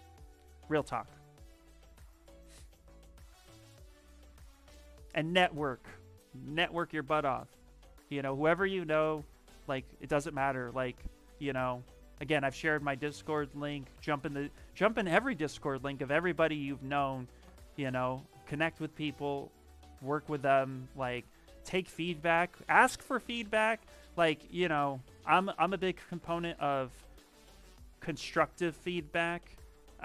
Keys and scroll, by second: 27.7 ctrl+v, 28.7 Return.